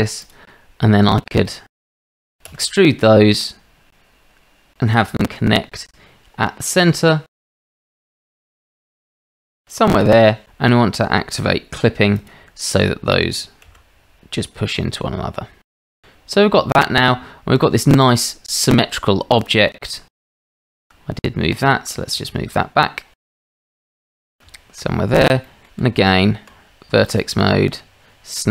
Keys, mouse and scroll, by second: 1.7 shift+z, 2.0 shift+z, 2.2 shift+middle click, 2.5 e, 6.7 click, 7.4 shift+middle click, 7.8 r, 8.5 g, 12.1 click, 13.6 g, 17.1 Tab, 19.4 click, 19.9-20.4 drag, 20.8 shift+middle click, 22.2-22.5 shift+middle drag, 22.5-23.3 drag, 23.3 g, 24.6 shift+middle drag, 25.5 shift+middle drag, 26.5 Tab.